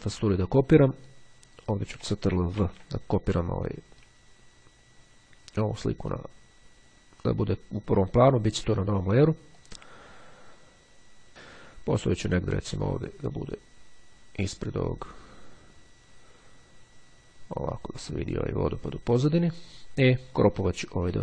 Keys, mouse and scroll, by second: 1.0 click, 2.7 ctrl+v, 6.2 click, 8.8 click, 9.7-11.3 drag, 11.6-19.8 drag.